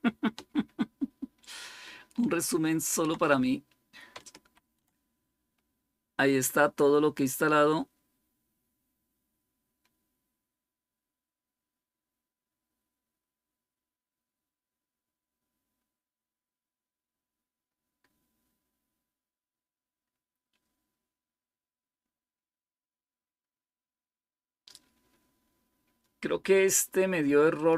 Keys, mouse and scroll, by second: 0.5 ctrl++, 1.1 ctrl++, 2.4 ctrl++, 4.3 ctrl+-, 8.2-8.8 scroll down 1, 8.8-9.4 scroll down 1, 9.4-11.1 scroll down 1, 27.4 click.